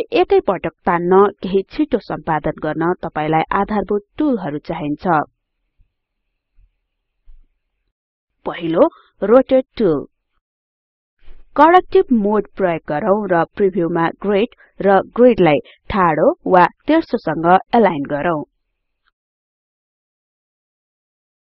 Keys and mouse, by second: 8.0 click.